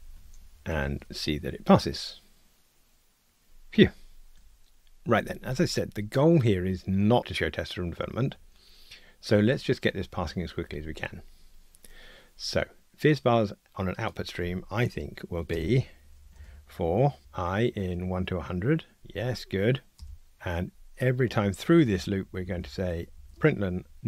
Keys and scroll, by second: 0.7 ctrl+r, 17.9 Tab, 22.4 alt+shift+Up, 23.5 Tab.